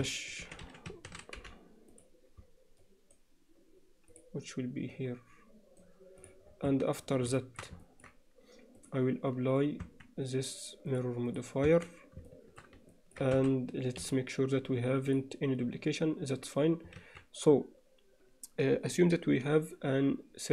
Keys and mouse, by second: 4.1 click, 6.7 Tab, 7.4 alt+shift+middle click, 7.9 ctrl+middle click, 8.8 click, 9.9 Tab, 10.9 click, 11.7 Tab, 12.3 shift+middle click, 12.9 ctrl+alt+middle click, 13.4 a, 14.0 m, 17.0 alt+a.